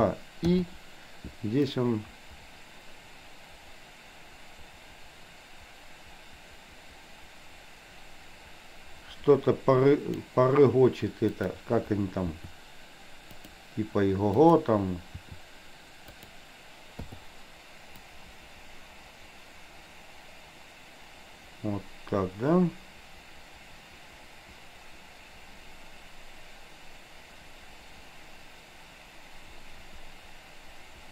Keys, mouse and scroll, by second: 0.6 i, 1.8-10.5 drag, 11.5 click, 12.3 r, 14.5 click, 15.2 r, 17.1 i, 18.1-31.1 drag.